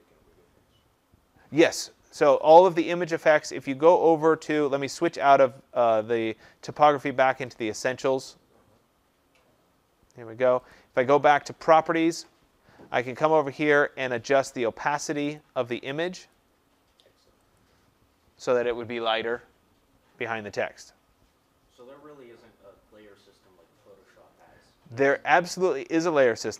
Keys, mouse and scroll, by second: 5.2 click, 7.6 click, 10.6 click, 15.3 click, 16.2 click, 17.5 click, 22.3 click.